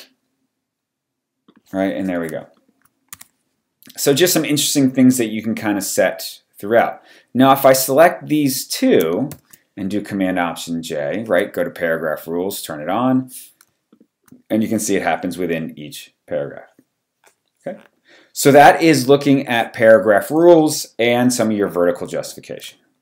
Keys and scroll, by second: 3.1 w, 6.1 w, 9.3 alt+super+j.